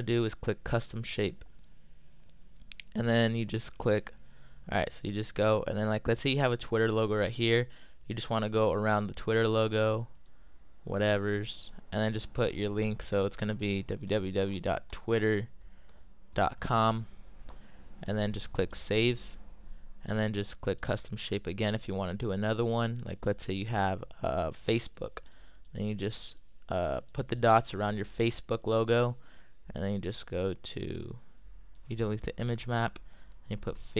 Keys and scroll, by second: 14.5-17.2 typing, 33.2-33.9 typing.